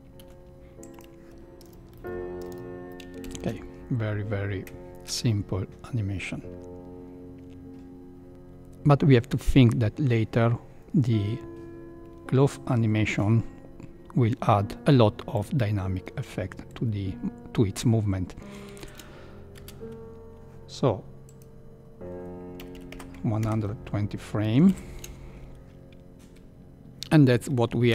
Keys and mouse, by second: 0.1 i, 1.5-2.9 typing, 3.2 shift+Left, 5.0 space, 8.3 shift+Left, 18.8 shift+Left, 19.7 space, 21.7-25.3 drag, 24.7 shift+Left.